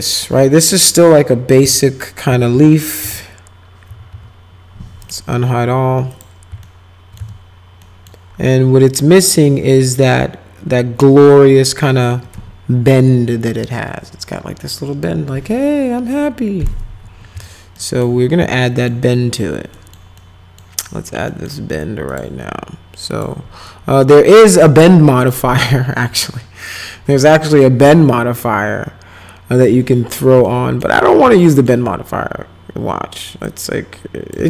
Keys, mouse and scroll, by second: 0.8 middle click, 1.6 F4, 2.3 F4, 2.5 F4, 3.0 F4, 3.9 F4, 4.1 F4, 5.1 right click, 6.1 click, 6.6 alt+middle click, 7.2 z, 7.8 middle click, 17.8 alt+middle click, 18.4 z, 18.7 middle click, 19.7 middle click, 20.2 middle click, 21.3 middle click, 22.1 click, 23.1 click, 23.8 click, 25.2 click, 27.8 b, 29.6 click, 30.5 alt+middle click, 31.4 alt+middle click, 33.5 click.